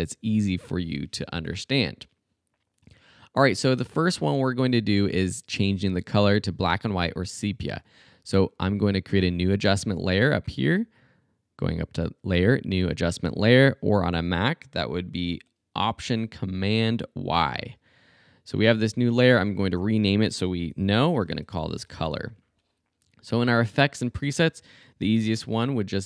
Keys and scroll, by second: 19.6 Return, 20.7-22.5 typing, 25.1 s.